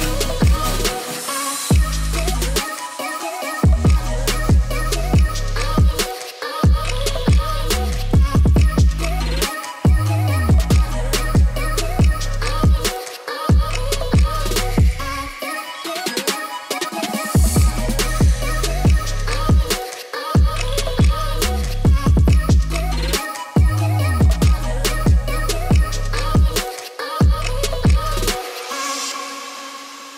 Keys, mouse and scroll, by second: 1.4-1.9 drag, 2.6-6.2 drag, 7.8 click, 8.2 middle click, 8.6 Tab, 9.2 middle click, 11.2 middle click, 11.6 middle click, 12.2 click, 12.6 shift+middle click, 13.2 click, 14.1-16.3 drag, 16.5 middle click, 17.0 middle click, 17.6 1, 17.7 click, 18.3 middle click, 18.8 g, 18.9 y, 19.2 x, 21.1 click, 21.3 middle click, 21.7 middle click, 22.6 shift+z, 22.8 middle click, 23.1 click, 23.7 3, 24.0 shift+click, 24.5 shift+click, 24.9 middle click, 25.6 Tab, 26.3 click, 26.6-27.6 shift+drag, 27.6 middle click, 28.0 middle click, 28.3 shift+z, 28.5 middle click, 28.7 Tab, 28.8 middle click, 29.3 shift+click, 29.6 g, 29.8 y.